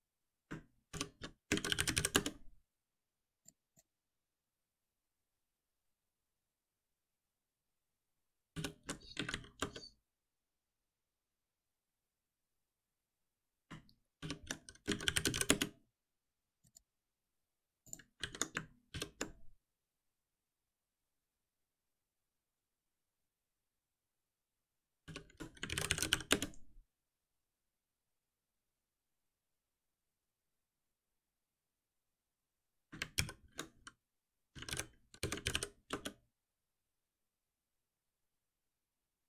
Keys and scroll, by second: 0.9 shift+F6, 8.5 shift+F6, 14.2 shift+F6, 18.2 ctrl+s, 18.9 shift+F10, 25.0 shift+F6, 33.2 ctrl+alt+m.